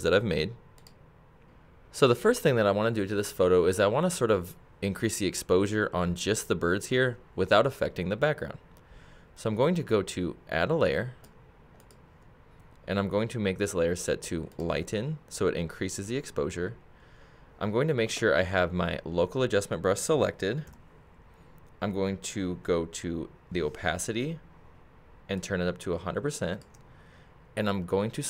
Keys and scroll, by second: 20.7 k.